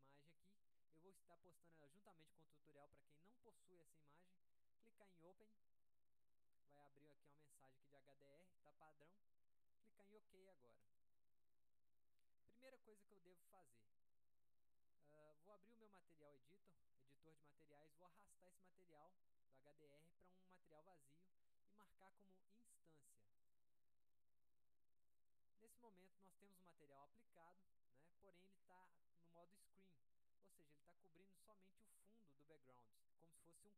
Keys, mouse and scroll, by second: 5.5 click, 7.1-7.5 drag, 11.0 click, 15.5 click, 16.7-17.4 drag, 18.7-20.2 drag, 21.7-22.5 drag, 23.6 drag, 25.2 click, 26.3-27.1 drag.